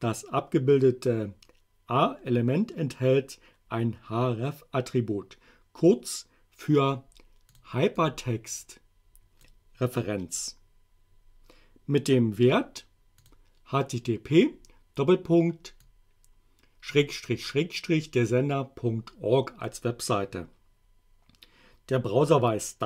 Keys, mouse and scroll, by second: 7.5 click, 8.0-9.5 drag, 13.2 click, 15.9-19.9 drag.